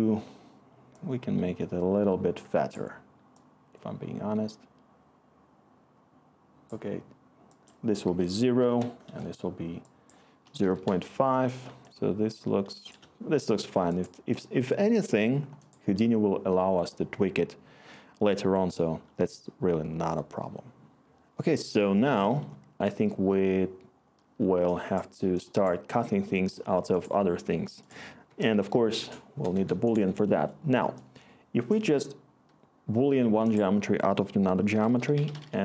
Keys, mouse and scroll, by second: 8.6 typing, 10.2-11.2 typing, 28.2 Tab, 28.3-29.5 typing, 29.5 Return, 34.6-35.6 typing.